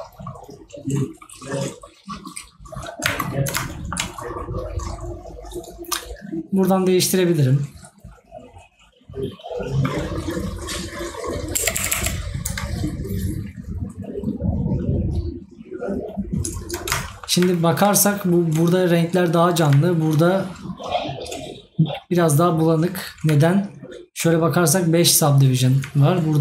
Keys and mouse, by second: 3.7 right click, 17.1 right click.